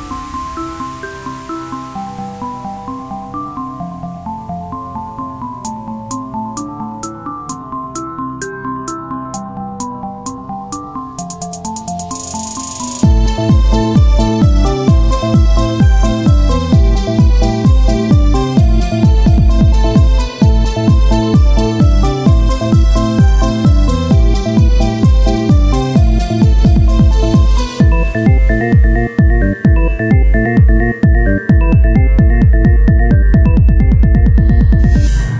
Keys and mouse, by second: 1.1 n, 3.1 click, 3.3 n, 4.1 KP_1, 4.7 click, 5.7 click, 6.4 shift+d, 7.5-8.5 drag, 8.7-10.9 drag, 10.9 s, 13.1-17.0 drag, 13.1 right click, 14.6 right click, 17.0 shift+d, 19.6 KP_1, 20.1 z, 22.2 z, 22.7 shift+a, 24.5 Tab, 24.9 Tab, 25.1 click, 26.0 ctrl+Tab, 26.5 z, 27.2 z, 28.4 g, 29.4 o, 30.7-35.3 typing, 31.6 click, 33.5 click.